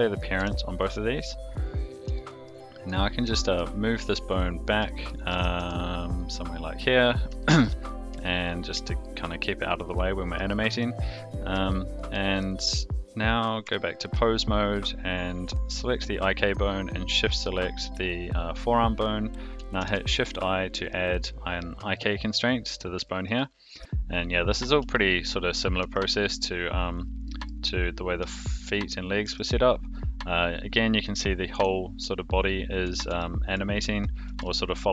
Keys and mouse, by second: 0.3 alt+p, 2.1 shift+middle click, 2.8 click, 3.3 shift+middle click, 4.8 shift+middle click, 5.3 g, 8.5 click, 9.0 shift+middle click, 10.5 shift+middle click, 11.7 shift+middle click, 13.6 Tab, 19.8 shift+i, 21.9-22.3 shift+middle drag, 23.0 shift+middle drag, 23.7 click, 24.9-25.2 shift+middle drag, 25.8 g, 27.2 middle click, 28.2-28.6 shift+middle drag, 29.2 g, 33.1 alt+g, 34.2 alt+r, 34.7 click.